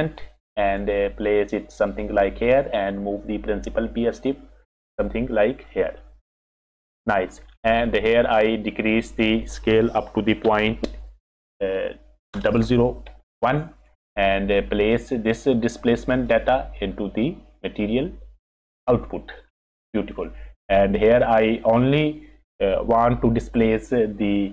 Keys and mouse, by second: 2.7 click, 3.0-4.7 drag, 5.8 click, 6.6 click, 6.8 click, 8.0 click, 8.9-13.8 drag, 12.5 KP_0, 14.3 click, 16.2-18.8 drag, 19.8 click, 20.9 click.